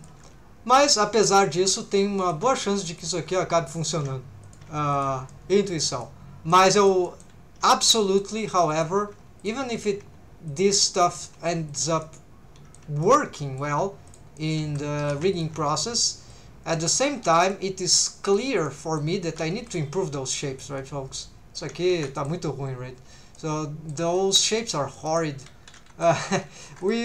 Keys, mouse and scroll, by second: 0.0 click, 0.2 g, 0.8 shift+click, 1.5 right click, 1.5 click, 1.6 g, 2.2 shift+right click, 2.2 shift+click, 2.9 right click, 2.9 click, 3.2 g, 3.8 shift+right click, 3.8 shift+click, 4.4 click, 4.6 g, 4.9 shift+click, 5.3 middle click, 6.0 middle click, 6.7 middle click, 7.1 shift+middle click, 7.9 middle click, 8.7 click, 9.1 g, 9.4 shift+click, 9.8 click, 9.9 g, 10.5 shift+click, 11.0 click, 11.3 g, 11.7 shift+click, 12.0 middle click, 13.0 shift+middle click, 13.4 middle click, 14.1 click, 14.4 middle click, 15.0 3, 15.3 alt+shift+click, 16.3 right click, 16.3 click, 17.0 middle click, 17.9 right click, 17.9 click, 18.7 middle click, 19.3 alt+a, 19.6 c, 20.8 right click, 21.2 click, 22.0 alt+a, 22.2 middle click, 23.4 middle click, 24.1 middle click, 24.6 shift+middle click, 24.9 middle click, 25.4 middle click, 26.8 click.